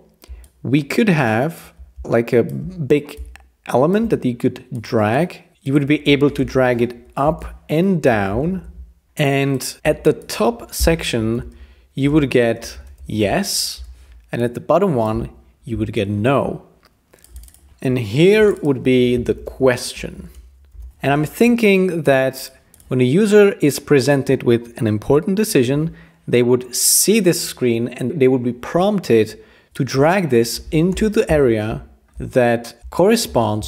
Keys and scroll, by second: 6.4 Return, 8.4 shift+v, 9.8 t, 11.3-13.7 typing, 13.7 Escape, 15.5-16.2 typing, 17.4-18.2 typing, 20.1-21.3 typing, 30.9 Return.